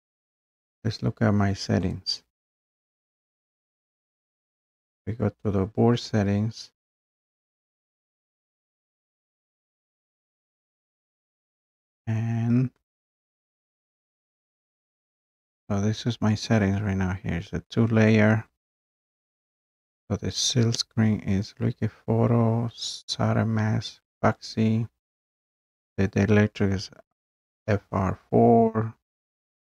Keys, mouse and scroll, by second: 15.0-20.6 drag.